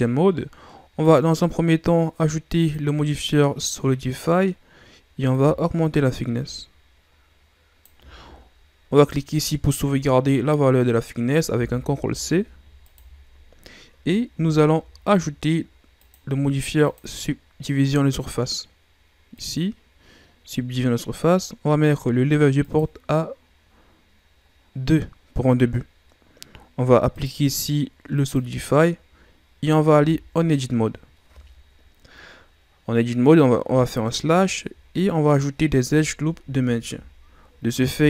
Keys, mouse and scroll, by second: 1.1-3.4 drag, 3.4 scroll down 1, 3.6-5.3 middle drag, 5.3-8.4 drag, 8.9-12.0 drag, 16.0-19.9 drag, 22.6-25.6 drag, 27.1-30.0 drag, 30.0 Tab, 33.6 KP_Divide, 34.9-37.9 middle drag, 37.9 ctrl+r.